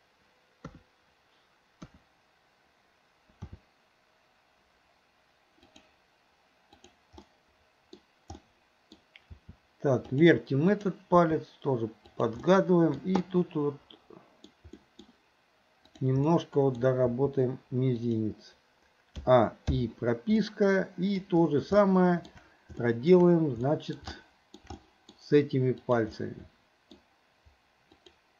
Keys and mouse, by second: 0.7 KP_3, 1.9 KP_1, 3.5 r, 7.3-8.0 middle drag, 8.4-9.0 middle drag, 9.4 r, 10.8 click, 11.2 r, 12.5-13.0 middle drag, 13.3-14.5 middle drag, 14.8 middle drag, 15.9 click, 16.3-16.9 middle drag, 17.1 r, 19.3 a, 19.8 i, 20.5-21.2 middle drag, 21.8-22.3 shift+middle drag, 22.9 shift+middle drag, 23.7 middle click, 24.2 shift+middle click, 24.8-25.2 middle drag, 25.8 click, 26.3-27.0 middle drag, 28.1 shift+click.